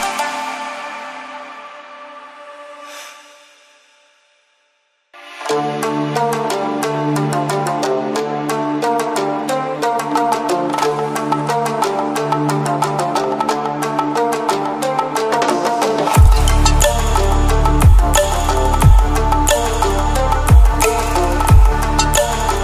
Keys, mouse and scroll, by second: 2.5-4.4 typing, 5.6 typing, 6.1 click, 8.5-13.8 drag, 15.2 ctrl+a, 16.3-18.2 typing, 19.5-22.6 drag.